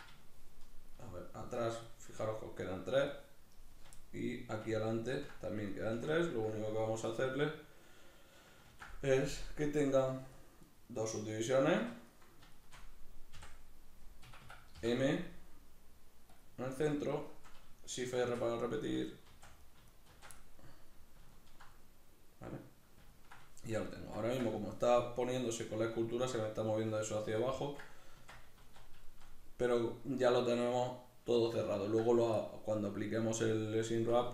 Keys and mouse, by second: 8.4 ctrl+r, 10.5 right click, 11.5 1, 11.8 right click, 12.3 shift+right click, 13.1 ,, 14.1 Escape, 16.7 right click, 17.0 shift+right click, 18.0 shift+r, 18.6 right click, 18.8 shift+right click, 19.0 shift+r, 19.4 right click, 19.6 shift+right click, 19.9 shift+r, 20.2-34.3 middle drag, 28.0 Tab.